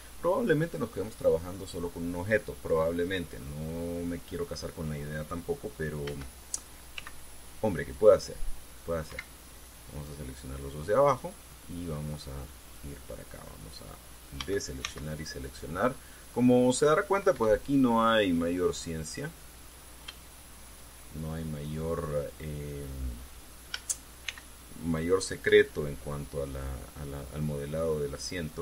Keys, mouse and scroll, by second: 6.8 a, 7.7 c, 8.0 click, 9.8 Escape, 10.6-13.7 drag, 15.1 a, 15.6 c, 16.8 click, 18.1 Escape, 18.9-20.6 drag, 21.0-22.0 shift+middle drag, 24.5 a, 25.0 c, 25.1 click, 26.2 Escape, 26.6 click, 28.5-28.6 drag.